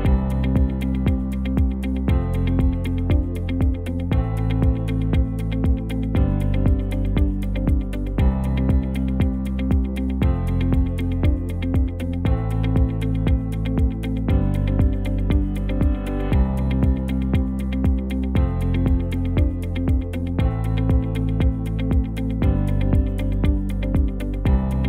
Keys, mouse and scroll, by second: 20.3 n, 22.1 n.